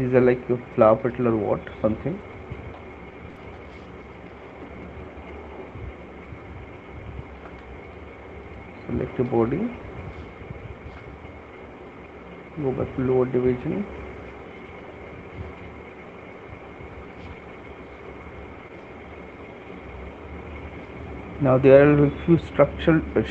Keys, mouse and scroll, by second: 1.6 right click, 1.8 shift+click, 2.7 alt+click, 3.7 right click, 4.7 right click, 6.5 shift+click, 8.0 alt+click, 8.6 alt+click, 9.6 click, 12.8 click, 20.5 shift+click, 22.7 right click.